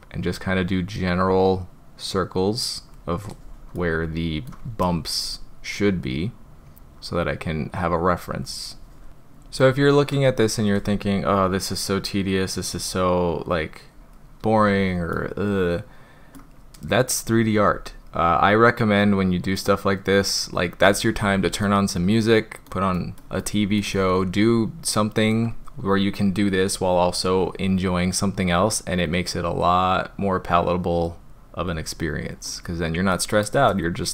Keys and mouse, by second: 1.2-2.8 drag, 3.8-4.3 middle drag, 4.3 click, 6.0-8.2 drag, 9.1-10.1 middle drag, 11.3-12.8 drag, 12.9-13.9 drag, 15.1-16.4 middle drag, 17.7-19.0 drag, 19.2-20.1 drag, 21.7-22.7 middle drag, 23.0 middle click, 23.5-23.8 shift+middle drag, 23.9-25.3 middle drag, 28.2-31.0 drag, 32.5-33.1 middle drag.